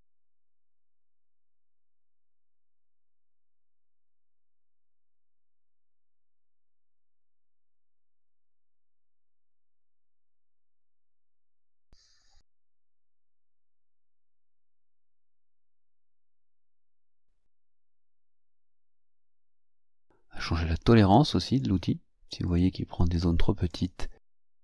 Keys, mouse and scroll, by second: 12.9 click, 17.6 click, 18.8 click, 19.8 click, 21.5 click, 22.5 click, 23.7 click, 24.4 click.